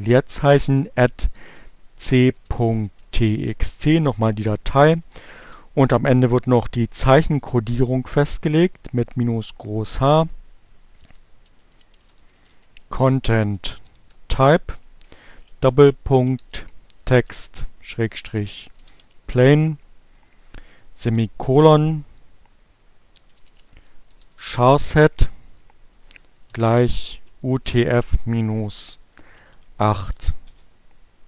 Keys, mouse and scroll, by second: 0.2 alt+q, 0.6-3.1 typing, 4.6 shift+h, 5.6 space, 10.4-11.8 typing, 12.8-14.3 typing, 15.4-18.9 typing, 20.5-21.9 typing, 23.0-24.2 typing, 25.7-29.3 typing.